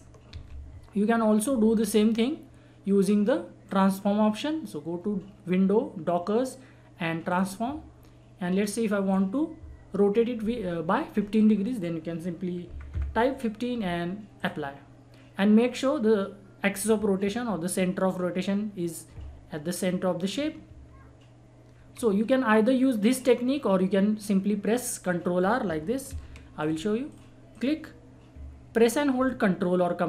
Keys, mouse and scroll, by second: 0.3 ctrl+z, 1.7 click, 7.2 click, 11.3 click, 14.4 click, 20.7 ctrl+Num_Lock, 20.7 click, 25.6 ctrl+Num_Lock, 26.1 ctrl+z, 26.6 click.